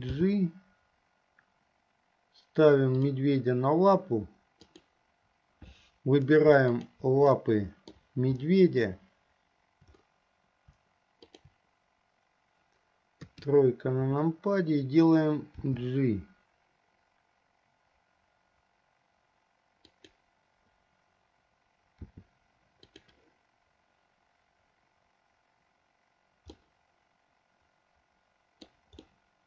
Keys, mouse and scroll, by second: 0.4 g, 4.8 click, 6.8 shift+click, 7.6-8.4 middle drag, 11.6 shift+click, 13.5 KP_3, 15.8 g, 22.1 r, 26.7-28.9 middle drag, 29.2-29.4 middle drag.